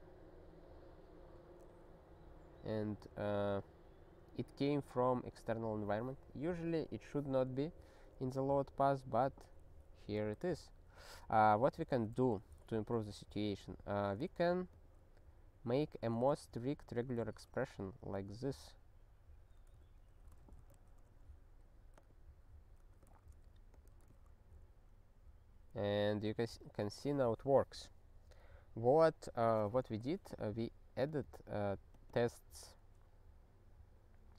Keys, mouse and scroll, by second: 8.1 click, 8.8 click, 10.8 n, 11.8 ctrl+/, 12.2 ctrl+s, 13.5 click, 14.7 click, 15.8-16.8 typing, 19.8 alt+b, 20.2 ., 20.4 *, 20.7 ctrl+s, 21.9 click, 22.1 click, 22.8 ctrl+p, 23.1 ctrl+e, 23.7 click, 24.2 ctrl+e, 31.1 click, 31.2 double click, 31.3 double click, 31.9 click, 32.1 double click, 32.2 double click.